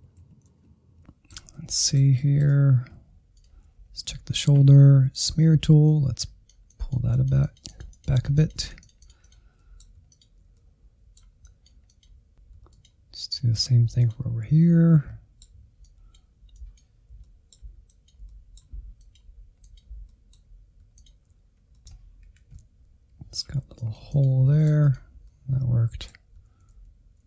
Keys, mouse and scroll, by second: 0.1 scroll up 2, 0.3 shift+middle click, 0.7 ctrl+click, 0.7-3.5 middle drag, 3.5 ctrl+click, 3.9-5.0 scroll up 2, 5.0-9.5 drag, 9.5 middle click, 10.1 click, 10.4 ctrl+z, 10.5 click, 10.8 middle click, 10.9 click, 11.1 alt+z, 11.2 middle click, 11.3 click, 11.5 middle click, 11.7 scroll down 1, 11.9 shift+middle click, 12.5 ctrl+click, 13.3 middle click, 13.6 click, 14.1 middle click, 14.3 click, 14.4 middle click, 14.6 click, 15.0 middle click, 15.4 ctrl+click, 15.6 middle click, 15.8 click, 16.0 middle click, 16.2 scroll up 1, 16.5 ctrl+z, 16.6 click, 16.9 ctrl+z, 17.3 click, 17.4 middle click, 17.7 scroll down 1, 17.9 f, 18.1 click, 18.3 middle click, 18.6 click, 18.9 shift+middle click, 19.4 click, 19.6 middle click, 19.8 click, 19.9 middle click, 20.2 ctrl+z, 20.7 scroll down 2, 20.7 middle click, 21.1 Insert, 21.3 middle click, 21.9 scroll up 2, 22.0 Insert, 22.1 middle click, 22.6 click, 22.9 middle click, 23.1 click, 23.3 middle click, 23.9 ctrl+z, 23.9 ctrl+z, 24.2 ctrl+z, 24.3 middle click, 24.7 Insert, 24.9 scroll up 1, 25.1 shift+middle click, 26.0 Insert, 26.1 scroll down 1, 26.3 middle click, 27.0 scroll up 1, 27.1 middle click.